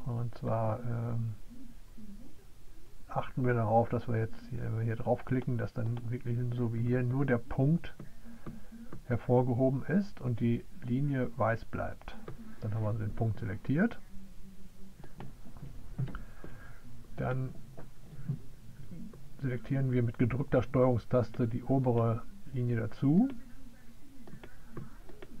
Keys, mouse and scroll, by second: 23.6-25.4 drag.